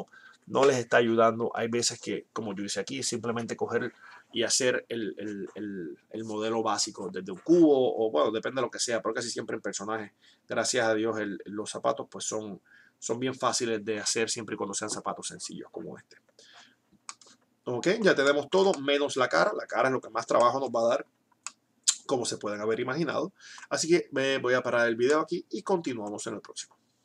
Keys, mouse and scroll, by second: 23.6 middle click, 25.2-26.9 middle drag.